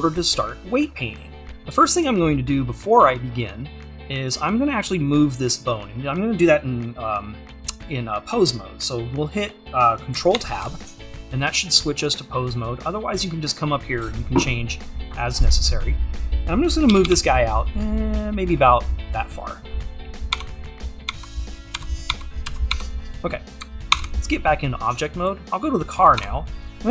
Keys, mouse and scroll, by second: 10.4 ctrl+Tab, 11.9 click, 17.1 g, 20.4 Tab, 23.9 ctrl+Tab, 25.9-26.2 scroll up 1, 26.2 Tab.